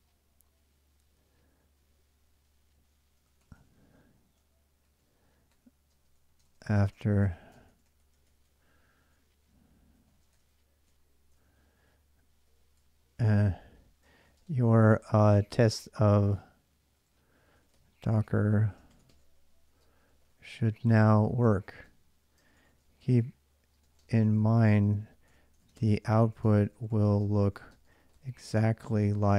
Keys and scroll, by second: 0.0 j, 2.0-10.6 typing, 11.1 ctrl+[, 11.2 ctrl+j, 12.0-16.0 typing, 17.0-29.3 typing.